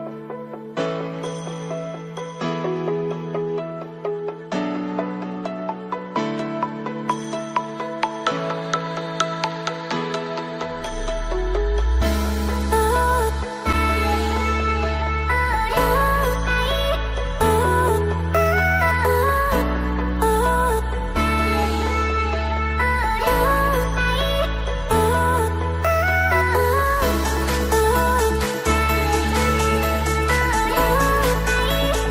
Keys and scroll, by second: 13.7 ctrl+z, 30.9 ctrl+e.